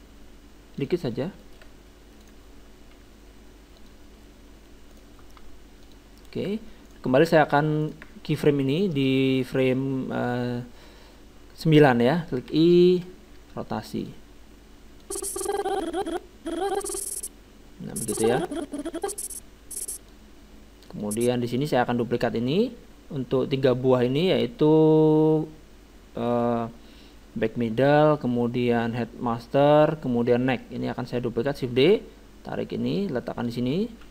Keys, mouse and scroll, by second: 1.1-2.2 middle drag, 2.2-3.9 right drag, 3.0 r, 4.9-6.6 right drag, 5.4 r, 6.9-9.5 right drag, 9.7 right click, 12.5 i, 15.0-16.8 drag, 21.0-22.7 drag, 31.8 shift+d.